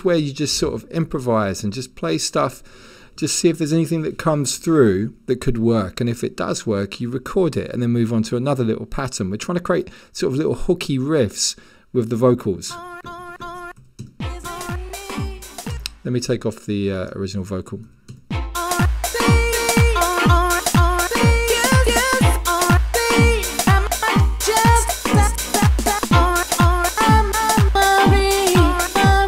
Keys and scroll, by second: 13.8 1, 15.7 0, 17.8 1.